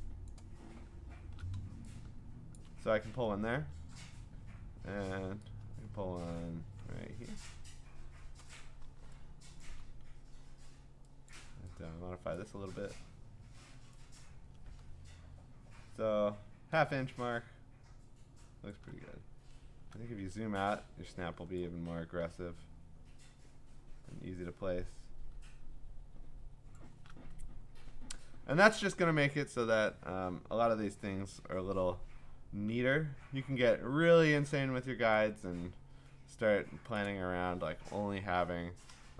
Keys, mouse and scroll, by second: 0.3 shift+click, 2.6 click, 7.4-9.6 shift+click, 9.5 shift+click, 9.6 click, 9.7 click, 11.3 click, 18.7 shift+click, 19.1-19.7 scroll, 26.7 shift+click, 27.4 scroll down 10, 27.6 scroll up 3, 28.1-28.7 scroll down 4, 31.8 scroll, 31.8 m, 36.9 click.